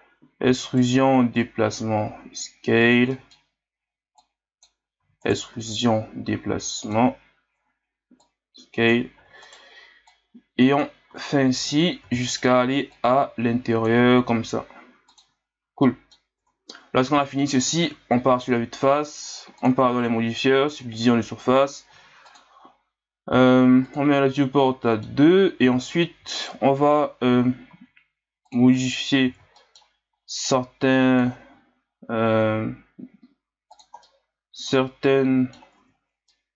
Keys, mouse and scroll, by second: 0.4 e, 1.4 click, 2.1 s, 3.1-4.2 middle drag, 4.2 click, 5.0 e, 8.2 click, 9.2 e, 10.1-11.1 drag, 11.1 s, 12.0 e, 12.9-14.2 drag, 14.2 s, 15.5-15.8 scroll down 1, 15.8 middle click, 16.4 Tab, 17.8 KP_1, 20.8-21.9 drag, 21.9 w, 23.8-24.6 drag, 24.6-25.2 middle drag, 25.2-25.6 scroll up 2, 25.6 Tab, 26.4 alt+right click, 27.7 s, 28.7 middle click, 29.3 ctrl+z, 29.6 middle click, 30.5-31.5 drag, 31.5 s, 34.0-35.8 middle drag, 35.8 Tab, 36.3-36.5 middle drag.